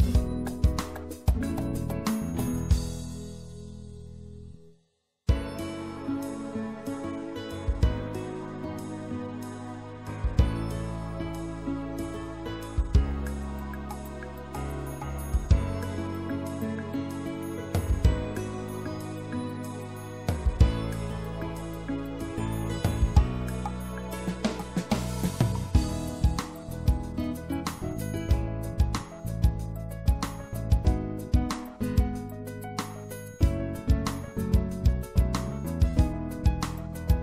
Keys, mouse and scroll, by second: 0.6-2.2 middle drag, 2.6 middle click, 5.2-7.0 middle drag, 6.5 i, 9.8 middle click, 9.9 middle click, 11.3-13.4 middle drag, 20.5 ctrl+z, 21.4 middle click, 23.1 middle click, 24.8 right click, 25.6-27.5 middle drag, 28.2-29.8 middle drag, 37.1-37.2 middle drag.